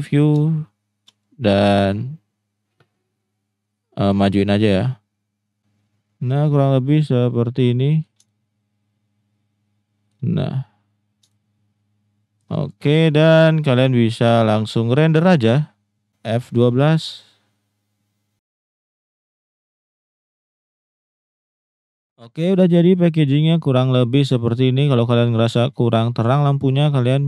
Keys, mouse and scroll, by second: 0.4-1.0 shift+middle drag, 5.6-6.7 drag, 7.3 middle click, 8.3-10.1 shift+middle drag, 11.4-12.4 shift+middle drag, 15.5 shift+middle click, 16.6 F12.